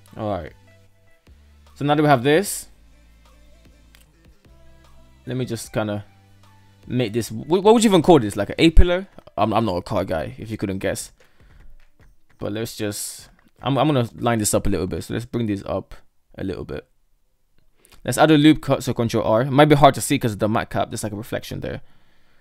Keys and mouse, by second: 0.0-0.9 middle drag, 1.4 shift+middle drag, 1.8-2.8 middle drag, 2.9 KP_3, 3.0 shift+middle drag, 4.0 shift+middle drag, 4.2 shift+middle click, 5.0 shift+middle drag, 9.8 shift+middle drag, 10.4 right click, 10.6 Tab, 11.4 shift+middle click, 12.0 KP_1, 12.4 right click, 13.9 g, 16.2 g, 17.7 ctrl+r, 21.9 right click.